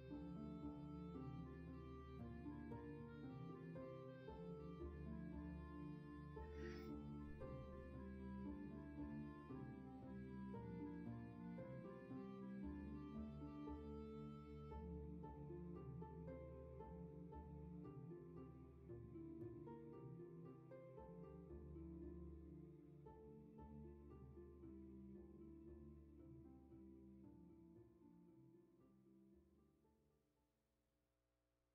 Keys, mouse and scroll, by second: 11.6 ctrl+z.